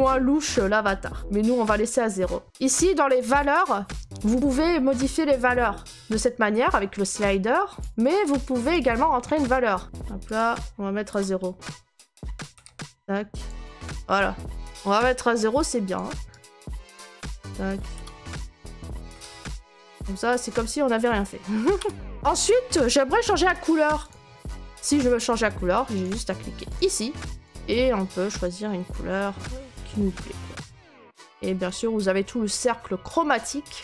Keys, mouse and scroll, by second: 0.4 click, 1.2 0, 2.6 0, 3.1 click, 8.7 click, 9.8 BackSpace, 12.5 Tab, 15.1 click, 15.1 0, 16.0 click, 16.4 click, 17.2 click, 17.9 0, 19.1 Tab, 20.6 click, 21.7 0, 22.0 click, 24.1 click, 26.8 click, 31.1 click.